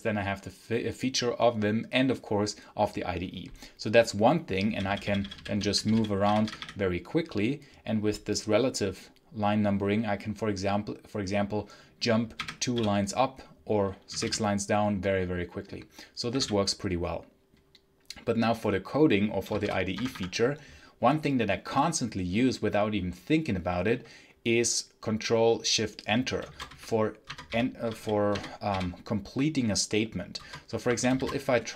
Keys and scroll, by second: 4.5-7.1 typing, 12.2 2, 12.6 k, 13.7-14.6 typing, 15.9-16.7 typing, 19.4 shift+a, 19.8 Tab, 26.1-28.6 typing, 30.2 Return, 30.5-31.5 typing.